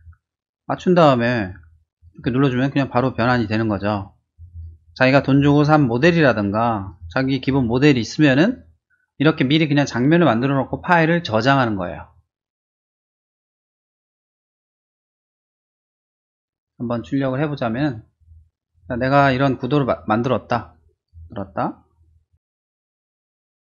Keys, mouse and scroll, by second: 1.9 click, 2.1 click, 3.3 click, 3.4 click, 4.3 click, 4.5 click, 5.1 click, 5.3 click, 5.7 click, 6.8 click, 7.0 click, 13.9 click, 14.1 click, 14.7 scroll down 1, 14.8-16.2 middle drag, 16.3 middle click, 17.5-18.6 drag, 19.0 middle click, 19.7 click, 20.4 click, 21.3 click, 21.6 click, 21.8 click, 22.7 click.